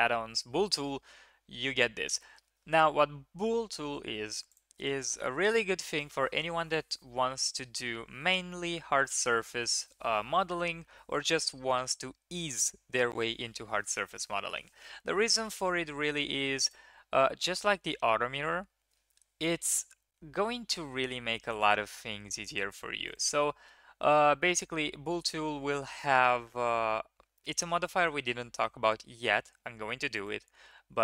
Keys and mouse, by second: 16.6 click, 21.5 click, 23.0 click, 30.2-31.0 drag.